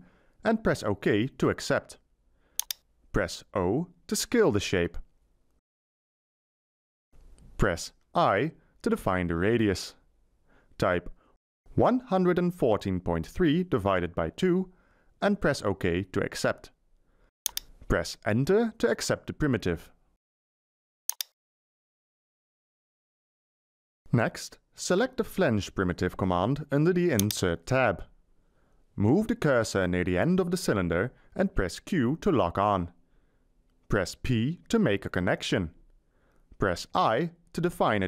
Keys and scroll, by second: 0.0-0.1 typing, 3.5 o, 10.0 Delete, 11.4-14.6 typing, 18.4 Return, 31.9 q, 34.3 p, 37.2 i.